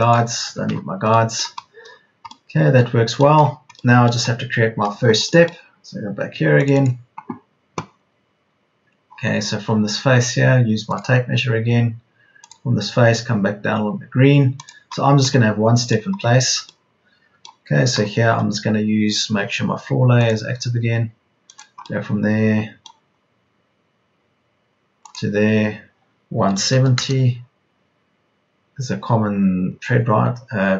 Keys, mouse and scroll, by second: 17.8 Escape, 18.2 l, 22.8 l, 26.2 KP_1, 26.5 KP_7, 26.7 KP_0.